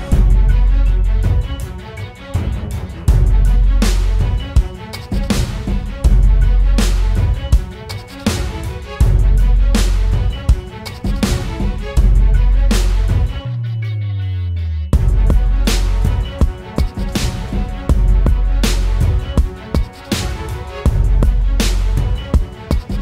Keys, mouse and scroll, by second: 14.9 ctrl+t, 16.8 ctrl+click, 19.7 ctrl+click, 21.4 ctrl+click.